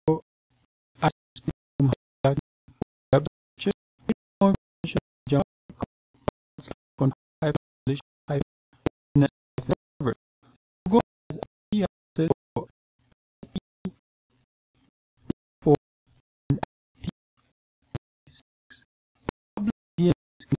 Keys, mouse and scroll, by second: 8.2-9.2 scroll down 2, 10.6-11.2 scroll down 2, 11.7-14.1 scroll down 2, 14.6 click, 15.2-16.9 scroll up 2.